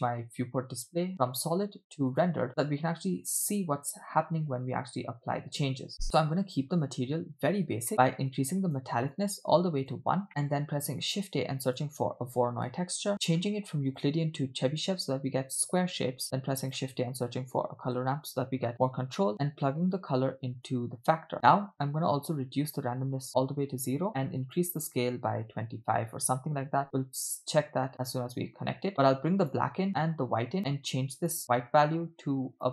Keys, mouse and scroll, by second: 2.5 click, 7.9 middle click, 7.9-8.3 scroll up 2, 8.4 click, 9.1 click, 10.5 middle click, 10.5 scroll up 2, 10.9 shift+a, 13.2 middle click, 13.9-14.9 drag, 16.0 shift+a, 19.9 click, 20.0-20.7 drag, 21.3 drag, 22.3-23.4 drag, 24.4-26.3 drag, 28.2-29.5 drag, 30.0-30.6 drag, 31.2 click.